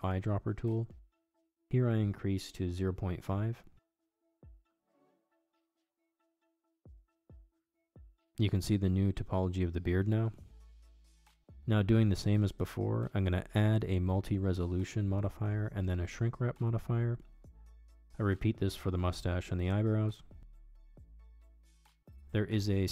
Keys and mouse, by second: 1.6-9.5 drag, 10.1 middle click, 10.5 Tab, 11.8 Tab, 12.9-14.8 middle drag, 17.9-19.0 drag, 20.0 click, 20.9 click.